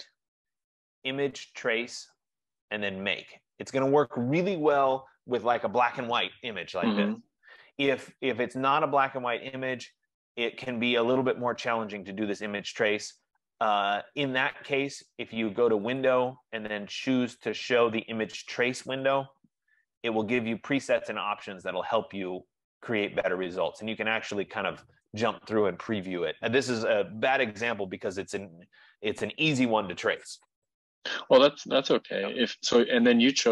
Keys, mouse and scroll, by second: 15.3 click, 16.1 click, 19.2 click, 30.2 F15.